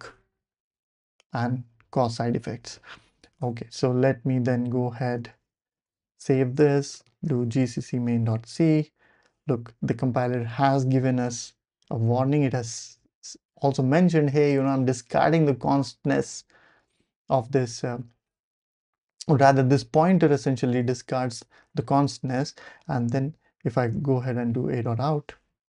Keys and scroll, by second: 2.4 super+z, 3.4 BackSpace, 3.7 ctrl+alt+super+p, 5.2-8.2 typing, 8.2 Return, 23.5-24.4 typing, 24.8 Return.